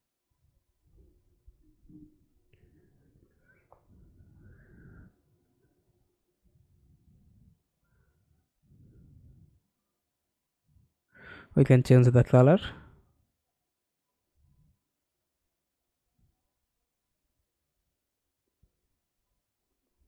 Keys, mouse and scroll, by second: 5.4-5.9 scroll up 1, 5.9 scroll down 1, 10.0-10.7 scroll down 4.